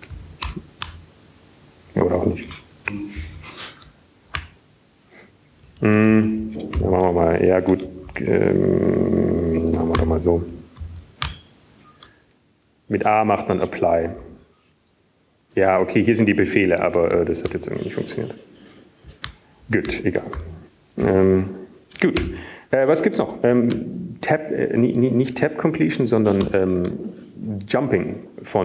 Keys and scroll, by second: 2.4 Up, 2.4 Down, 2.4 Return, 4.0 Up, 4.0 Down, 4.5 Up, 4.5 Down, 4.5 Return, 5.0 typing, 6.5 typing, 9.0 typing, 10.5 typing, 11.2 ctrl+g, 15.1 shift+a, 16.4 Down, 17.7 ctrl+g, 24.0 q, 28.0 alt+shift++.